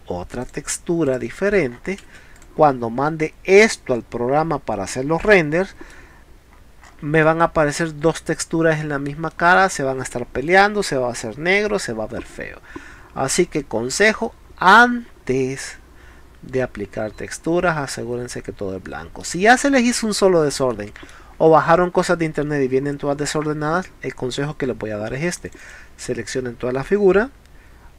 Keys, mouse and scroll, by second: 0.5 click, 1.1 click, 1.7 scroll up 1, 2.2 space, 2.4 click, 2.6 scroll down 1, 5.3 middle click, 6.8 scroll up 1, 7.2-7.7 middle drag, 8.8 middle click, 9.3 middle click, 12.7 scroll down 1, 13.2 scroll up 2, 18.9 middle click, 19.6 scroll down 1, 19.9 scroll up 1, 20.7-21.1 middle drag, 22.0 scroll up 1, 25.3 click, 25.5 click, 25.6 click.